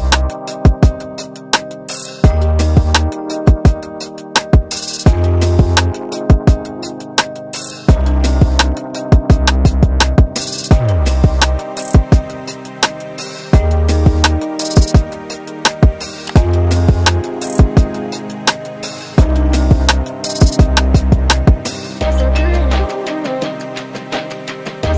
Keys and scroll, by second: 2.1 q, 4.3 q, 11.8 space, 13.1 m.